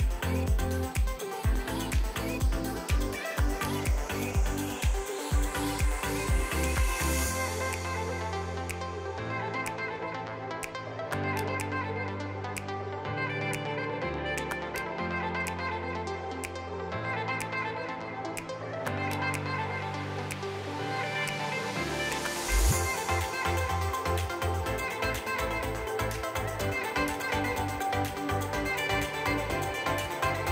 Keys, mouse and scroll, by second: 0.8 r, 2.3 g, 3.4 click, 3.7 l, 4.0 r, 5.2 g, 6.3 click, 6.7 l, 7.0-7.4 scroll down 6, 7.4-7.7 scroll up 1, 7.7 click, 8.0 l, 8.6 l, 9.3 l, 9.7-10.3 scroll down 3, 9.9 middle drag, 10.3 middle click, 11.2 click, 11.8 l, 12.4 scroll up 2, 13.6 click, 14.5 l, 15.0 g, 20.3 g, 23.3-26.4 typing, 27.5 Left, 28.7 l, 29.2 l, 29.7-30.1 middle drag, 30.1 scroll up 1, 30.3-30.5 middle drag.